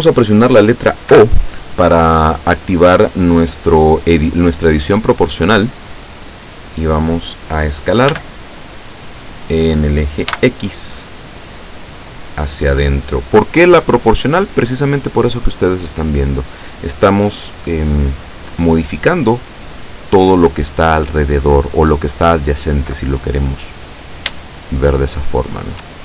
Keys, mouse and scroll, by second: 1.2 o, 8.2 s, 10.4 x, 16.4 click, 24.7-26.0 shift+middle drag.